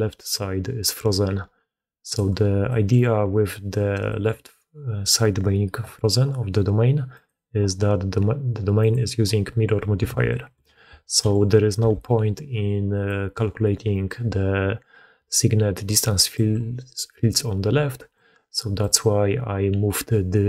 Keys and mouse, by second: 0.0-0.9 typing, 0.9-2.0 drag, 2.1 d, 2.6 click, 4.0 click, 7.1 click, 8.8-10.0 drag, 10.2 shift+drag, 11.0 click, 11.7 KP_1, 12.5 d, 12.8 d, 12.9-16.3 drag, 12.9 d, 16.2 d, 16.3 d, 19.2-20.4 drag.